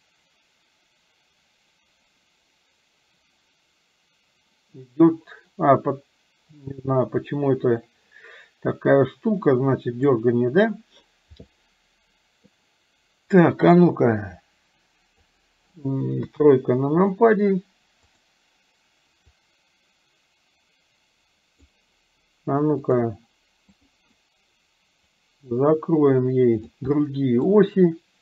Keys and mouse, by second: 0.2-10.2 drag, 13.6 click, 14.1-15.3 drag, 16.3 KP_3, 19.7-21.8 drag, 23.8 click, 25.3-26.8 drag, 26.9 middle click.